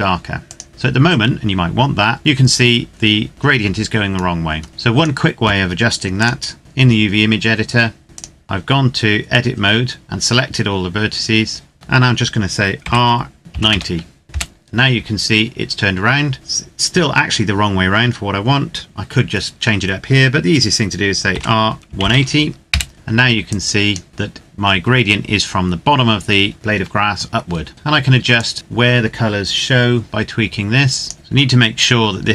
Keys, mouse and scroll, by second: 4.1-4.7 scroll down 1, 4.7 click, 7.8 Tab, 8.0 click, 12.5 r, 13.4 KP_9, 13.5 KP_0, 14.2 KP_Enter, 21.0 r, 21.6 KP_1, 21.7 KP_8, 21.8 KP_0, 22.4 KP_Enter, 23.1 click, 27.5-28.1 scroll up 1, 28.1 click, 31.1 g.